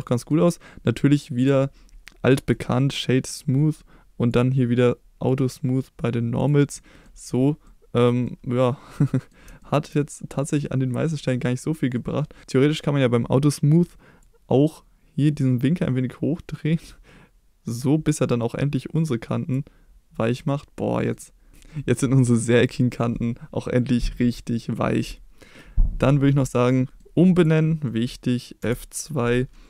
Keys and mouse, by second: 0.1 middle drag, 1.4 click, 2.6-3.4 right drag, 5.3 click, 6.8 middle click, 7.7-8.1 middle drag, 8.3-9.4 middle drag, 9.6 shift+middle drag, 10.6-11.2 middle drag, 12.1-12.4 middle drag, 14.3-19.6 drag, 20.3-21.2 middle drag, 21.8 middle click, 22.3 middle drag, 26.8 middle click, 27.4 click, 27.9 middle click, 28.6 F2.